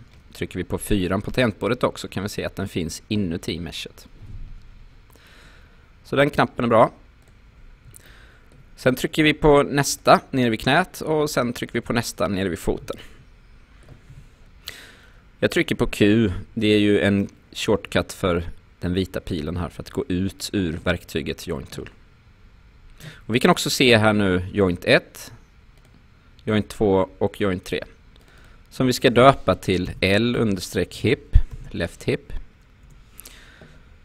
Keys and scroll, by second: 0.9 4, 4.5 5, 14.1 q, 29.9-32.0 typing, 32.9 Return.